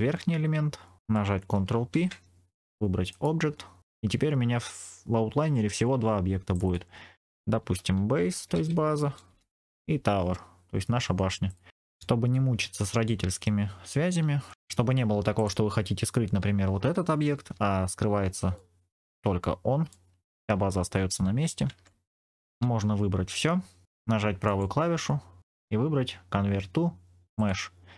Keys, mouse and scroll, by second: 1.8 ctrl+p, 6.4 click, 6.6-9.3 drag, 11.4 click, 14.4 click, 14.5 right click, 14.5 g, 15.3 click, 17.4 h, 18.5 middle click, 19.8 middle click, 21.7 ctrl+z, 23.1 a, 24.4 right click.